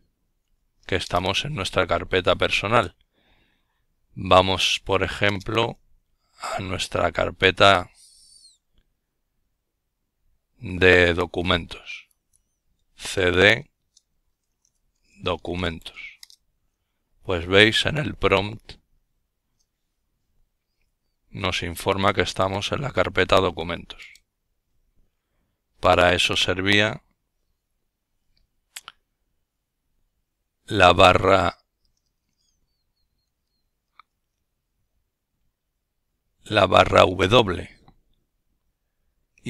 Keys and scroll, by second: 0.2-1.2 typing, 7.6-11.9 typing, 14.3 typing.